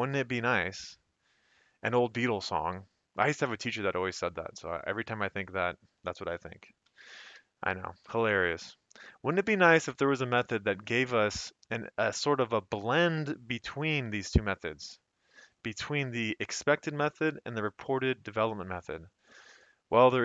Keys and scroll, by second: 6.8 F2, 7.3 Escape.